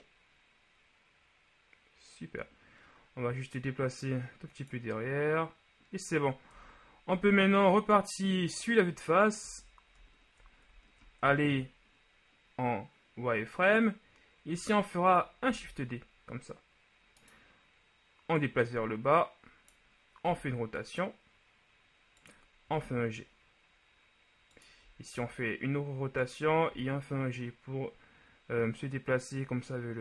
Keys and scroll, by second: 6.7 KP_1, 9.6 z, 10.1 ctrl+z, 10.8 ctrl+z, 15.5 shift+d, 20.4 r, 22.8 g, 25.3 r, 26.8 g.